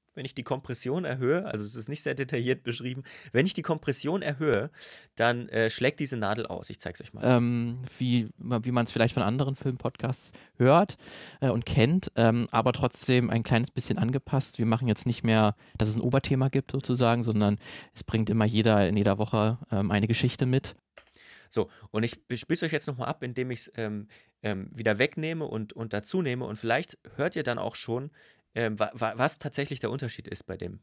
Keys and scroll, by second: 7.0 space, 20.6 space.